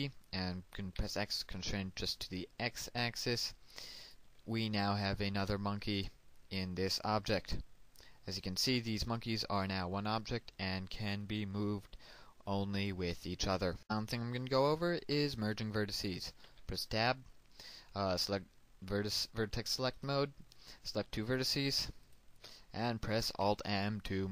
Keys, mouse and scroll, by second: 0.8 c, 1.4 x, 3.9 ctrl+click, 4.5-7.2 middle drag, 7.2 Tab, 7.5-8.7 scroll down 1, 9.0-13.2 drag, 14.5 scroll up 1, 14.7-15.2 scroll down 1, 15.4 shift+middle click, 16.4 shift+Tab, 16.8 scroll up 1, 16.9 scroll down 1, 20.0 click, 20.5-21.2 scroll down 1, 21.2 right click, 22.1 shift+right click, 23.4 alt+m.